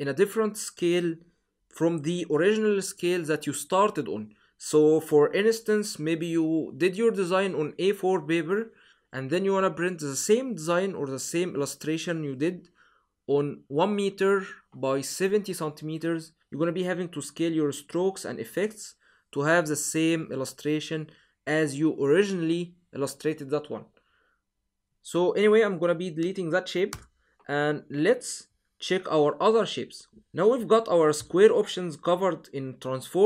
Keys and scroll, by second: 26.7 BackSpace.